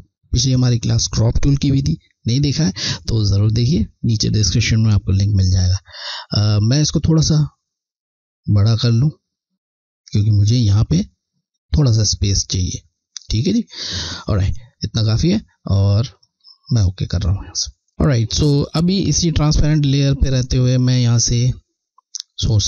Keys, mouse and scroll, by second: 3.9 click, 4.1 alt+scroll down 1, 4.9-6.7 scroll, 6.8 click, 16.1 click, 17.9-18.5 scroll, 20.0 click, 21.1 alt+click.